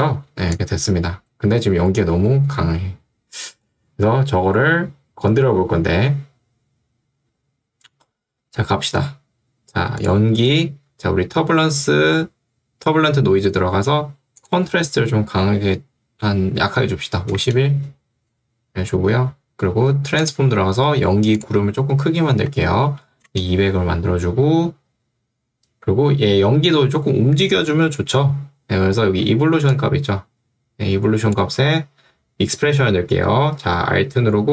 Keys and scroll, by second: 16.5-17.5 typing, 22.3-23.3 typing, 23.4 Return, 29.5 ctrl+2, 31.7 Escape.